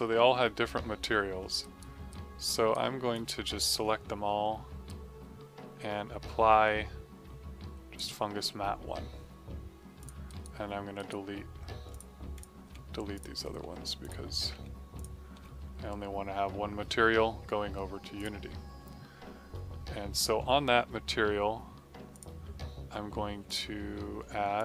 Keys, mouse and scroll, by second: 1.5 right click, 3.1 click, 4.8 right click, 9.9 click, 10.2 right click, 11.8 click, 12.6 Delete, 13.1 click, 13.6 Delete, 13.9 click, 14.5 Delete, 14.9 click, 15.3 Delete, 18.1 click, 22.0 click.